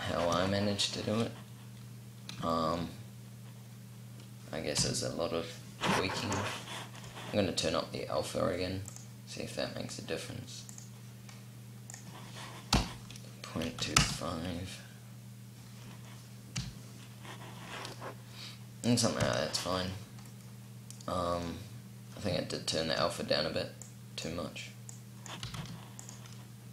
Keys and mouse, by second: 4.4 p, 5.7 p, 6.6 right click, 13.5-15.4 middle drag, 18.8 p, 25.1 r.